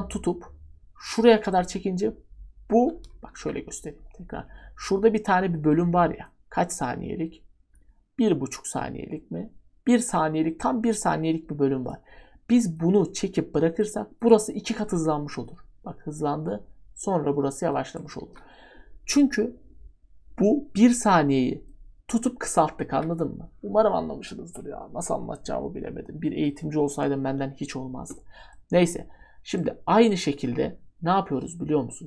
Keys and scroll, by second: 3.3 ctrl+z, 18.2 ctrl+z, 22.9 ctrl+z.